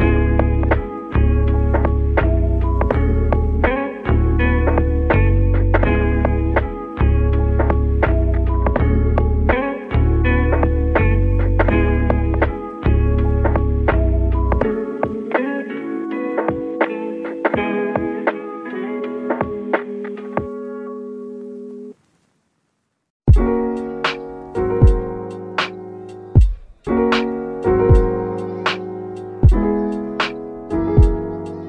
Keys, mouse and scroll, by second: 1.8 scroll up 1, 2.3 click, 5.0-6.4 middle drag, 6.4 shift+d, 6.7 x, 8.3 click, 10.1-11.6 drag, 15.8 shift+d, 16.1 x, 17.1 click, 18.8-20.9 drag, 23.5 shift+d, 23.9 x, 24.5 click, 26.2-28.0 drag.